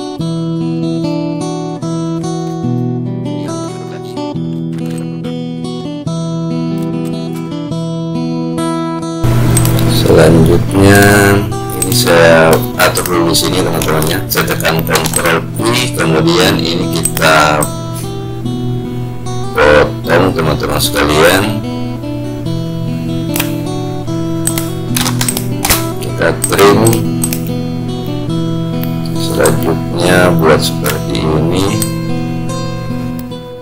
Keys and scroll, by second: 15.0 ctrl+q.